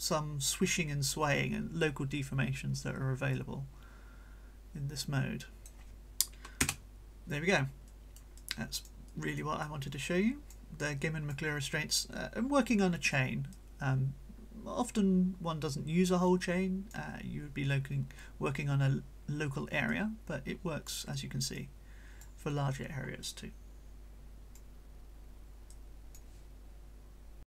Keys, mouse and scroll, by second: 3.3-5.9 drag, 6.7 Return, 7.9-9.6 right drag, 8.4-9.0 drag, 9.6-10.7 drag, 10.9-11.5 drag, 11.6 right click, 13.5-17.1 drag, 19.9-21.1 drag, 21.1-22.4 right drag, 21.6-22.4 drag, 23.2-24.7 drag, 25.7-26.3 drag, 27.4 click.